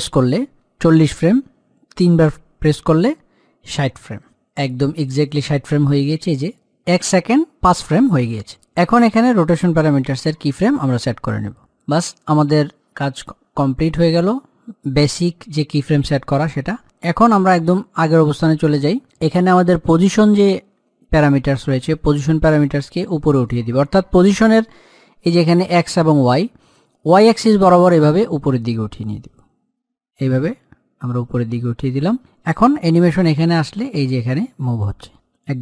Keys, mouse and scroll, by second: 2.1 shift+Page_Down, 10.1 click, 17.1-22.9 drag, 22.9-27.8 middle drag, 27.8-33.0 drag, 33.0-35.6 drag.